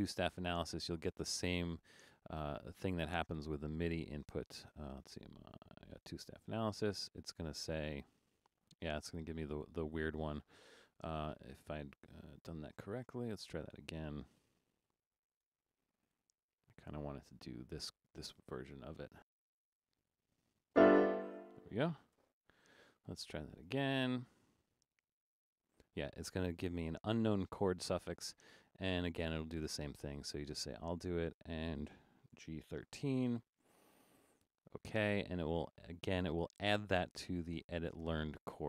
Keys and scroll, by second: 12.0 BackSpace, 17.8-18.2 typing, 19.2 Caps_Lock, 19.7 5, 22.9 Caps_Lock, 32.1-33.3 typing.